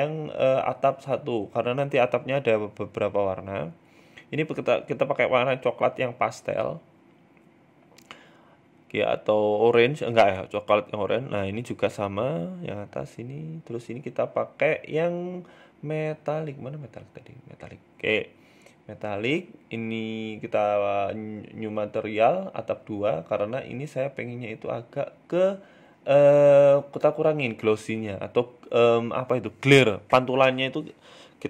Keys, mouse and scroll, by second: 1.7 click, 4.2 shift+middle click, 4.4 middle click, 5.1 click, 6.7 middle click, 8.4 right click, 8.6 shift+right click, 9.9 ctrl+l, 10.6 middle click, 11.1 right click, 11.5 middle click, 12.6 click, 17.3 middle click, 18.9 click, 19.1 click, 22.5 click, 23.7 click, 27.5 click, 29.2 right click, 29.5 shift+right click, 30.1 ctrl+l, 31.1 middle click.